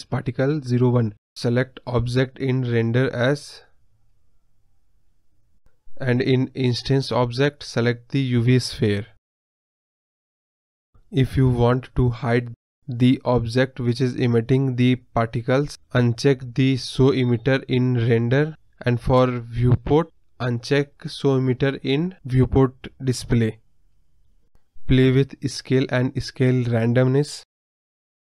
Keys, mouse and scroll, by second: 1.1-2.7 scroll down 1, 2.7-4.4 drag, 4.4-5.1 scroll down 1, 5.1-5.7 scroll down 1, 5.7-7.5 drag, 7.5-9.0 scroll up 2, 10.3-11.6 scroll down 1, 11.6-12.3 scroll up 1, 12.3-13.8 scroll up 1, 13.8-17.1 middle drag, 17.1-18.6 drag, 19.3-21.4 drag, 21.4-22.0 scroll down 6, 22.0-23.5 drag, 23.5 scroll down 1, 23.7-24.2 middle drag, 24.2 scroll down 2, 24.3 middle drag, 24.5-24.8 scroll up 5, 24.8 scroll down 2, 24.9 middle click, 25.2 drag, 25.5-26.0 scroll up 2, 26.0-28.2 drag.